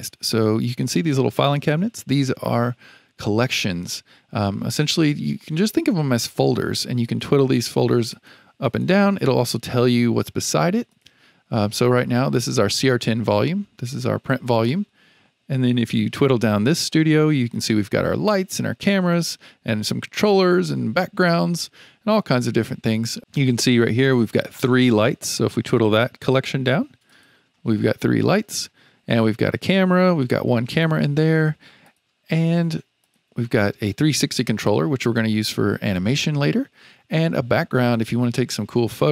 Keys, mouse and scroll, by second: 7.0 click, 7.3 click, 8.1 click, 8.6 click, 10.9 click, 12.4 click, 16.7 click, 27.0 click, 30.6 click, 31.8 click, 33.0 click, 38.3 click.